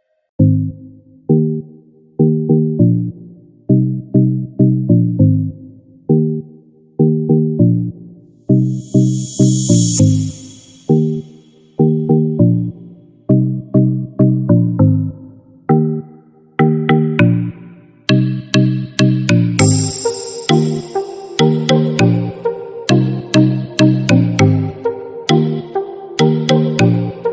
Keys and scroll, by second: 11.0 ctrl+-, 13.3 ctrl+z, 19.0 ctrl+z.